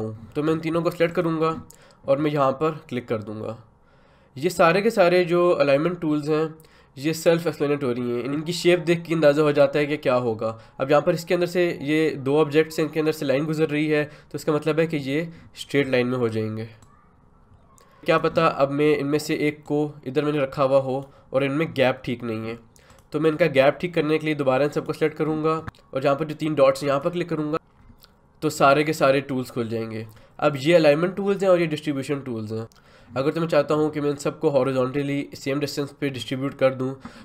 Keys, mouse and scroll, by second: 14.9-22.9 drag.